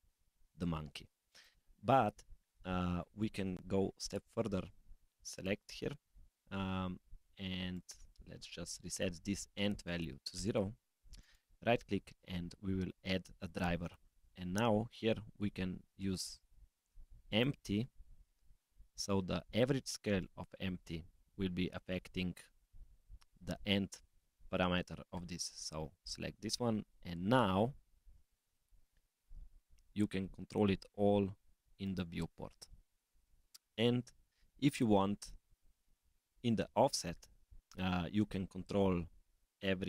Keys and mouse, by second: 1.2 middle click, 5.3 click, 7.7-10.4 drag, 11.2-21.7 drag, 25.9 click, 26.6 s, 28.2 click, 29.6 g, 33.1 s, 35.2 click.